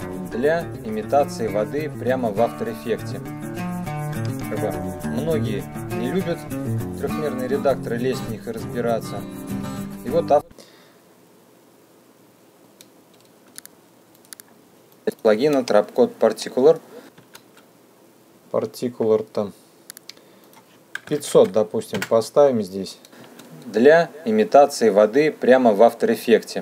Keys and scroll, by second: 10.6 space, 15.6 space, 21.6 KP_5, 21.7 KP_0, 22.5 KP_Enter, 23.9 space.